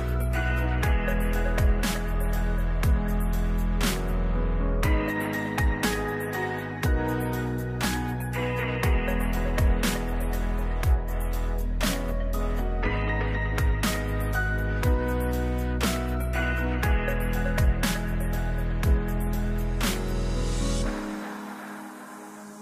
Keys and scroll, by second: 5.1 shift+Down, 5.5 Up, 6.4 ctrl+s, 15.9 ctrl+space, 16.3-17.6 typing, 21.6 3.